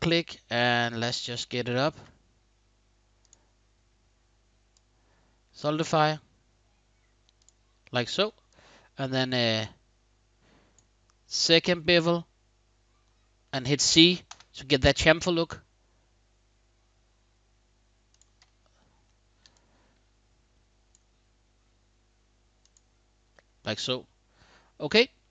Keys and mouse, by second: 4.4-5.3 drag, 7.1 click, 7.5-7.9 middle drag, 8.2-10.5 drag, 14.0 c, 17.9 click, 18.2 click, 18.6 middle click, 18.8 middle drag, 19.3-20.6 drag, 22.4 click, 23.0-24.3 middle drag, 24.7-25.3 middle drag.